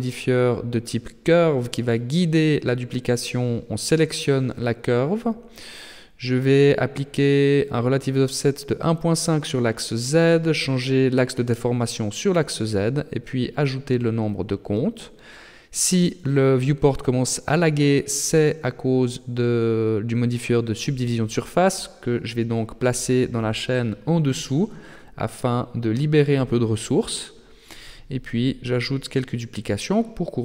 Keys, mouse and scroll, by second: 1.6 click, 2.9 click, 7.2 click, 11.2 click, 13.0 click, 13.2 click, 13.5 click, 13.8 click, 15.7 click, 17.5 click, 22.4 click, 26.0 click, 27.6 click, 28.0 click, 28.1 click, 28.8 click, 29.4 middle click.